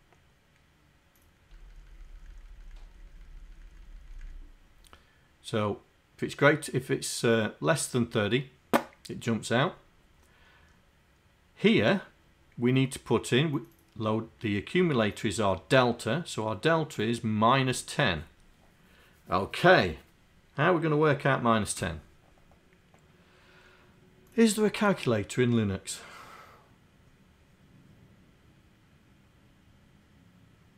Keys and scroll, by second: 1.6 Down, 2.4 Down, 3.6 Down, 3.9 Down.